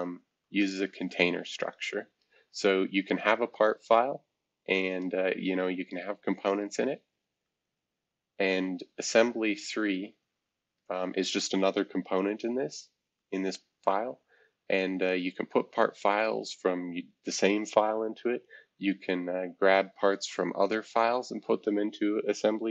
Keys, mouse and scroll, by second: 0.0-5.4 drag, 5.8 click, 6.3 click, 6.9 click, 7.4-9.1 drag, 9.2 click, 10.4 click, 13.1-14.6 drag, 15.4 click, 16.1 click, 19.4-20.7 drag, 20.8-22.7 drag.